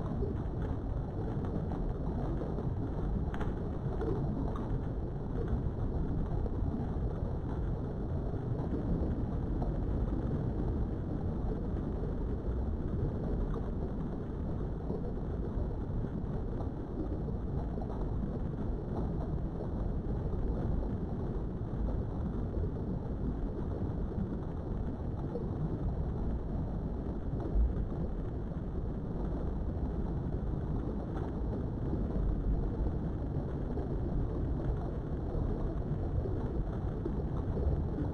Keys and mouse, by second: 0.3 click, 0.9 click, 1.6 s, 3.1 click, 3.5 click, 4.2 s, 5.9 click, 6.2 g, 6.8 right click, 7.0 g, 7.4 y, 8.3 click, 8.8 g, 9.2 z, 10.6 click, 11.8 click, 12.5 g, 14.2 click, 14.8 click, 15.3 g, 15.8 click, 17.4 ctrl+r, 18.0 right click, 18.7 click, 19.1 g, 20.3 click, 21.5 click, 21.8 g, 23.2 click, 23.7 click, 23.9 g, 25.4 click, 26.6 ctrl+z, 27.3 g, 28.6 click, 31.1 ctrl+r, 31.7 right click, 32.4 click, 32.6 g, 34.0 click, 35.4 click, 35.8 g, 36.2 click, 36.7 click, 37.0 g, 37.8 click.